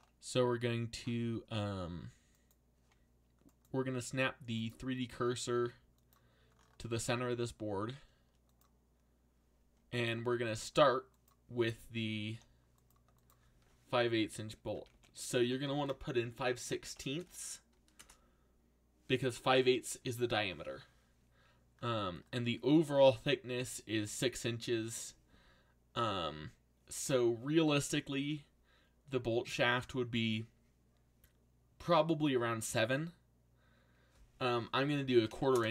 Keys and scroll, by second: 12.3 8, 14.5-16.8 typing, 17.9 Return, 34.5-35.7 typing.